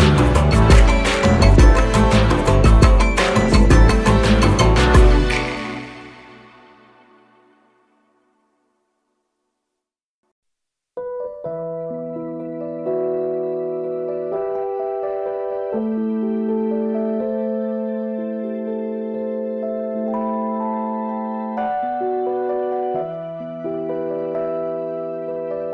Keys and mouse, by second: 5.6 Down, 6.7-7.8 drag, 10.1-11.6 alt+drag, 16.0 Up, 17.9-20.2 alt+drag, 24.1-25.3 alt+drag.